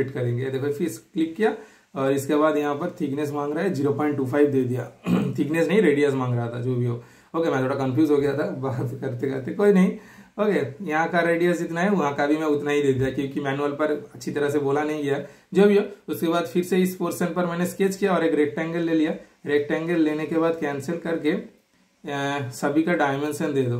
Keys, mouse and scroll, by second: 0.0 middle click, 1.1 super+click, 4.1 super+Return, 4.9 scroll down 1, 5.5 super+scroll up 1, 5.6 shift+super+middle click, 6.1 super+scroll down 1, 6.2 super+scroll up 1, 6.7-9.4 super+middle drag, 10.3 super+scroll up 1, 10.3-11.1 typing, 10.6 super+click, 13.8 super+click, 13.8 typing, 15.8 super+scroll up 1, 15.8 typing, 15.8 super+scroll down 1, 19.9 super+click, 20.4 super+right click, 21.0 super+click.